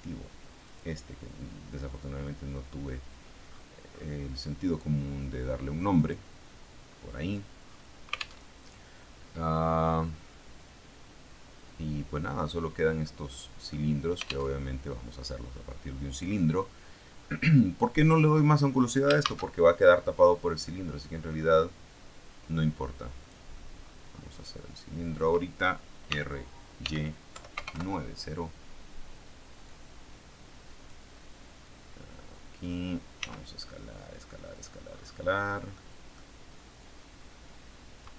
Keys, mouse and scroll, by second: 0.5 click, 3.2-3.8 scroll down 2, 3.8-4.5 scroll up 2, 5.9 click, 6.8-7.5 scroll down 2, 7.5-8.3 scroll up 3, 8.4 alt+Tab, 14.4 alt+Tab, 15.3-16.1 scroll down 2, 16.1-16.5 scroll up 2, 16.5 scroll down 2, 17.1-17.9 scroll up 2, 19.1 shift+a, 23.1 click, 23.7-24.3 scroll down 2, 24.3 scroll down 1, 26.0-28.0 typing, 29.9-31.0 drag, 31.5-33.1 drag, 33.1 s, 34.5 click, 34.7-35.7 scroll up 1, 35.7 middle click, 36.7-38.1 drag.